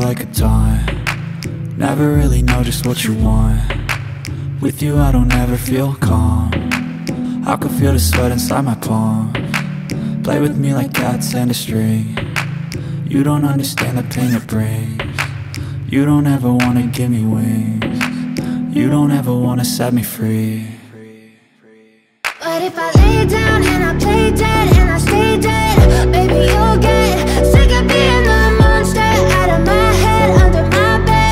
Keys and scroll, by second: 29.8 BackSpace, 30.7 g, 30.7 k.